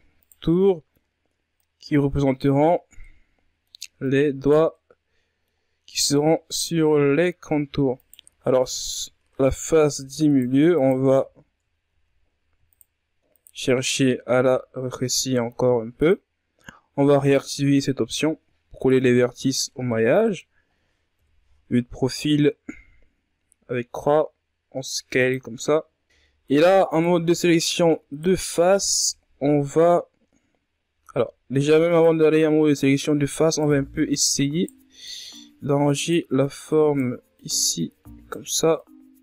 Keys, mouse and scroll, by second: 0.1-1.2 middle drag, 1.2 right click, 2.6-3.6 middle drag, 3.6 right click, 4.3-7.5 middle drag, 7.5 alt+right click, 9.0 alt+shift+right click, 9.8 alt+shift+right click, 10.3-11.4 alt+shift+right drag, 11.4 ctrl+z, 12.3 shift+right click, 12.9 shift+right click, 13.8 s, 16.9-17.4 drag, 17.8-19.0 middle drag, 19.0-19.5 ctrl+scroll up 4, 19.5 middle click, 20.1-20.7 scroll up 1, 20.7 KP_3, 21.5 scroll up 1, 22.3 s, 25.4-26.6 scroll down 2, 26.6 ctrl+Tab, 27.0 right click, 27.7 shift+right click, 29.0-29.4 scroll down 1, 29.4-29.8 scroll up 1, 29.8-30.3 ctrl+scroll down 1, 31.6 ctrl+Tab, 32.3 right click, 33.7 right click, 36.1 right click, 36.9 right click, 38.3 right click.